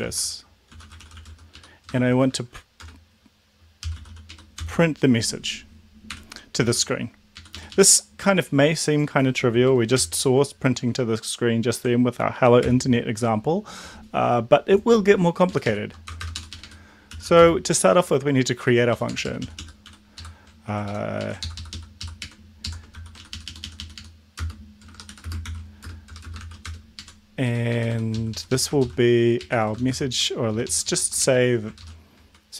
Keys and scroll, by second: 0.1-5.1 typing, 6.1 Home, 6.6 ctrl+shift+Right, 7.4 Up, 7.5 Up, 7.7 Up, 9.9 ctrl+', 12.7 ctrl+l, 15.6 Up, 15.7 Up, 16.0 Return, 16.2 Return, 16.4 Up, 16.5 Up, 16.6 Up, 17.1-17.8 typing, 18.9 Down, 19.1 Down, 19.2 Down, 19.4 Down, 19.6 Down, 20.1 End, 20.8 ctrl+Left, 21.2 Right, 21.4 ctrl+shift+Left, 22.1 ctrl+shift+Right, 22.6 ctrl+shift+Left, 22.9 ctrl+c, 23.1 Up, 23.3 Up, 23.4 Up, 23.6 Up, 23.8 Up, 23.9 Up, 24.8-26.4 typing, 25.1 End, 25.4 ctrl+v, 26.7 Return, 27.0 Up, 27.4 Down, 27.7 Up, 27.8 End, 28.1 ctrl+Left, 28.7 ctrl+shift+Left, 29.4 Right, 29.7 shift+;, 29.9 shift+space, 30.5 Left, 30.6 Left, 30.8 Left, 31.2 ctrl+shift+Right, 31.7 ctrl+shift+Left, 32.1 ctrl+shift+Right.